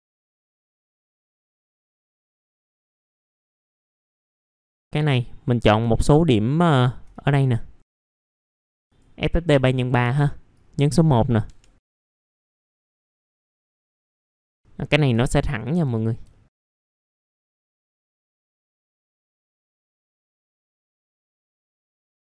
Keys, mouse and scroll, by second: 1.2 w, 1.5 click, 2.4 scroll down 1, 2.6 alt+middle click, 2.8 click, 3.1 middle click, 3.1 scroll down 1, 3.5 alt+middle click, 3.6 scroll up 1, 3.7 F4, 4.0 alt+middle click, 4.3 middle click, 4.6 alt+middle click, 4.9 click, 5.9 alt+middle click, 6.7-7.1 scroll up 1, 7.1 ctrl+click, 8.0 F3, 8.2 scroll up 1, 8.4 F3, 8.5 click, 9.7 middle click, 10.0 F3, 10.6 click, 11.5 F3, 12.0 click, 13.1 scroll down 1, 14.1 click, 14.4 alt+middle click, 15.1 alt+middle click, 16.3 alt+middle click, 17.0 e, 17.6 right click, 18.1 alt+middle click, 18.4 alt+middle click, 18.7 alt+middle click, 18.8 scroll down 1, 19.0 middle click, 21.1 scroll down 1, 21.6 alt+middle click.